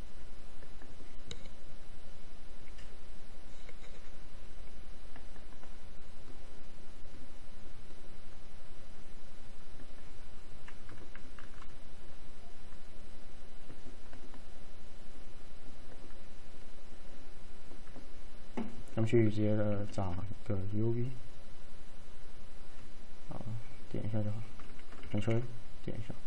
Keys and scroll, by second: 11.5 Delete, 25.3 ctrl+a.